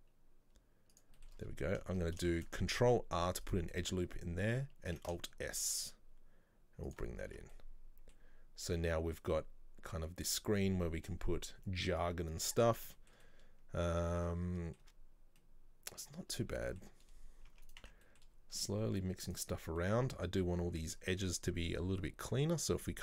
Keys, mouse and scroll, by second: 1.3 shift+middle click, 1.5 scroll up 3, 2.0-2.4 shift+scroll down 1, 2.4 shift+middle click, 2.9 ctrl+r, 4.1-4.7 scroll down 2, 4.9 scroll down 2, 5.0 alt+s, 7.2 scroll down 1, 7.4 Tab, 7.6-11.8 middle drag, 13.0-15.2 shift+middle drag, 15.2 scroll down 2, 15.5-16.3 middle drag, 16.3 scroll up 1, 16.5 Tab, 16.7 middle click, 17.6 Tab, 17.7 right click, 17.9 Tab, 18.1-19.4 middle drag, 19.4 click, 19.9-21.1 middle drag, 21.1-21.7 scroll down 1.